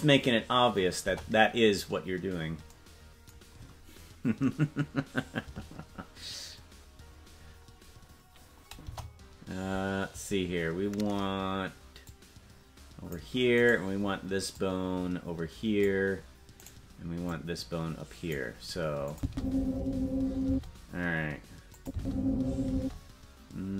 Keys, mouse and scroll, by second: 1.0 KP_0, 7.4-8.0 scroll down 4, 8.5 scroll up 1, 8.8 KP_0, 10.9 scroll down 1, 12.1-13.2 drag, 13.7 right click, 14.5-15.9 drag, 16.7 right click, 17.3-18.4 drag, 19.1-20.6 drag, 19.2 space, 20.5 space, 21.8 click, 21.9 space, 22.7 space.